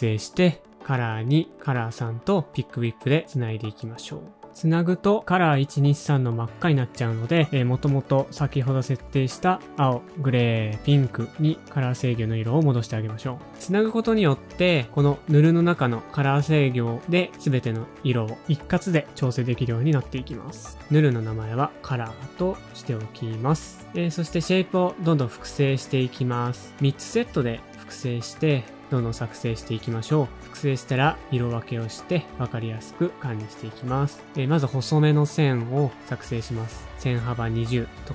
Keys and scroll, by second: 6.6 typing, 8.1 super+c, 10.4 super+v, 12.2 super+c, 14.8 super+v, 16.8 super+c, 19.7 super+v, 21.2-22.4 typing, 25.3 typing, 25.6 super+a, 26.4 typing, 26.5 super+a, 27.0 shift+super+a, 28.7 super+d, 28.9 super+], 29.1 super+[.